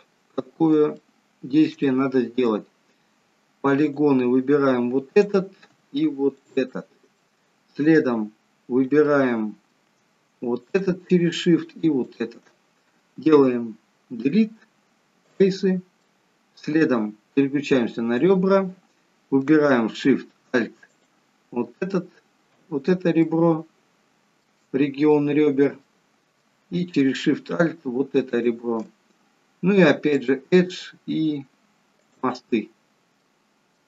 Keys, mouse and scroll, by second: 1.0 shift+middle click, 1.9 middle click, 3.8 click, 5.2 click, 6.4 shift+click, 7.2 shift+middle click, 8.0 middle click, 9.1 shift+middle click, 10.6 shift+click, 12.0 shift+click, 14.2 Delete, 16.1 middle click, 18.3 click, 21.0 alt+shift+click, 23.3 shift+middle click, 25.1 middle click, 25.8 shift+middle click, 28.7 alt+shift+click, 30.4 click, 32.8-33.3 scroll down 3, 33.6 middle click.